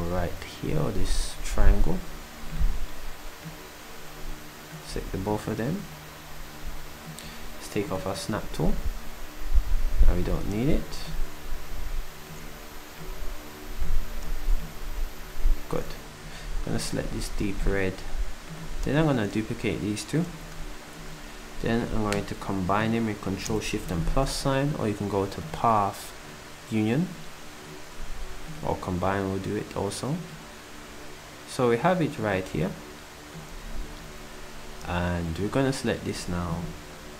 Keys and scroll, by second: 4.9 s, 17.0 s, 20.3 d.